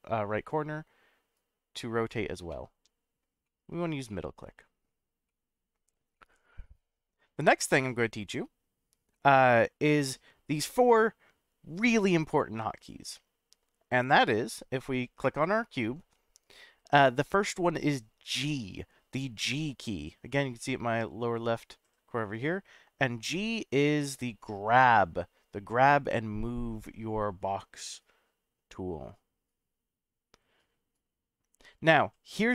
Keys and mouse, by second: 1.4 click, 2.5-3.2 middle drag, 3.4-4.0 middle drag, 4.1-5.1 middle drag, 5.3-5.8 middle drag, 6.1-7.1 middle drag, 7.9-8.9 middle drag, 9.1-9.4 middle drag, 12.7 click, 19.4 g.